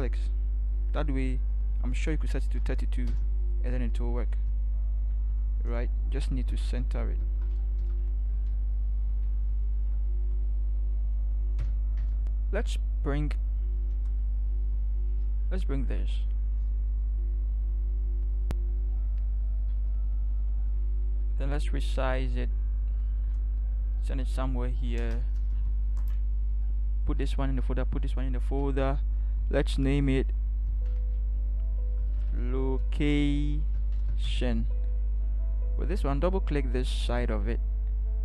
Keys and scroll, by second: 2.3-3.1 typing, 5.1 ctrl+t, 6.4 ctrl+Right, 6.7 ctrl+Right, 7.8 Right, 8.3 Right, 8.6 v, 9.1 Right, 12.0 Return.